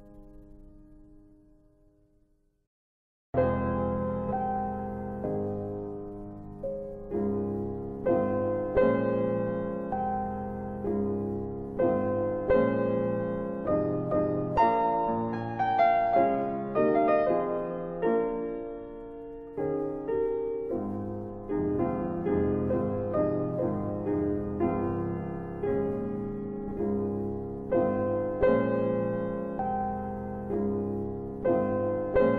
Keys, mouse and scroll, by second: 0.0 middle click, 0.7 click, 2.0 click, 3.2 middle click, 3.9 click, 5.7 click, 7.3 click, 8.7 click, 9.9 middle click, 10.5-11.1 scroll down 1, 11.1 middle click, 12.0-12.8 scroll up 1, 13.5 scroll up 1, 13.6 middle click, 15.2 click, 16.5 click, 17.5 click, 19.0 click, 25.1 shift+click, 26.3 click.